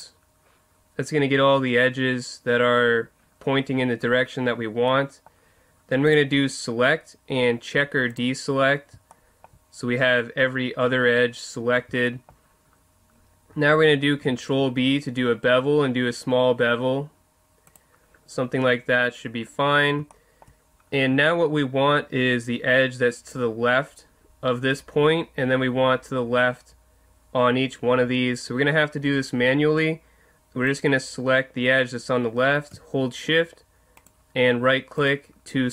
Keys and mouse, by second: 9.1-15.0 middle drag, 14.2 ctrl+b, 17.7 click, 19.0 click, 19.5-30.7 middle drag, 30.7 right click, 34.0-35.7 right drag.